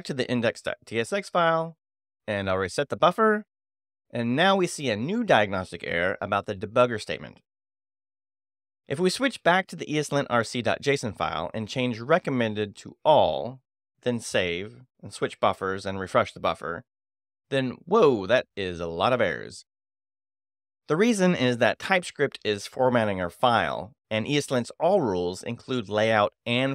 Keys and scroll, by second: 0.5 [, 0.6 b, 2.3 shift+e, 2.9 Return, 8.6 ], 8.7 b, 11.8 c, 11.8 i, 12.3 w, 12.6 Escape, 12.9 shift+;, 13.0 Return, 15.0 [, 15.0 b, 16.2 shift+e, 16.9 Return.